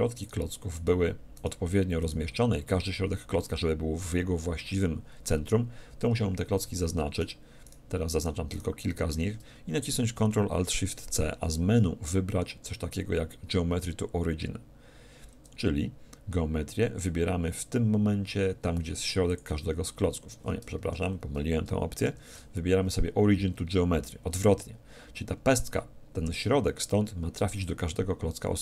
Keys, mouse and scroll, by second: 6.8-10.3 right drag, 20.8 ctrl+z.